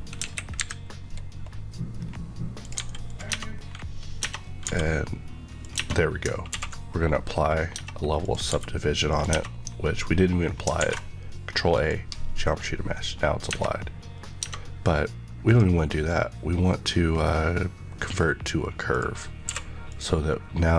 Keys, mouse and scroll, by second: 0.1 KP_1, 1.9-2.6 scroll up 1, 4.3 scroll up 1, 4.6 g, 5.6 click, 5.7 Tab, 6.4 ctrl+1, 6.8 scroll down 1, 7.3-7.7 scroll up 1, 7.7 Tab, 8.2 click, 8.4 g, 9.0 click, 9.2 Tab, 9.5-10.6 scroll down 1, 10.6 ctrl+scroll down 1, 10.7 ctrl+a, 11.7 click, 13.3 scroll up 1, 15.4 click, 19.4 click, 19.4 q, 19.8 click.